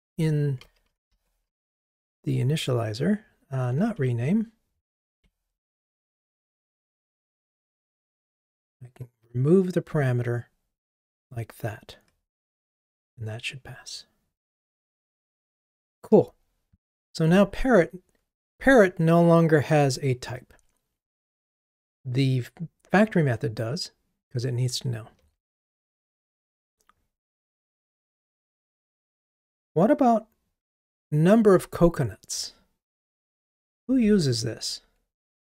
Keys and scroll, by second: 1.9 shift+F6, 12.6 ctrl+r, 34.5 super+b.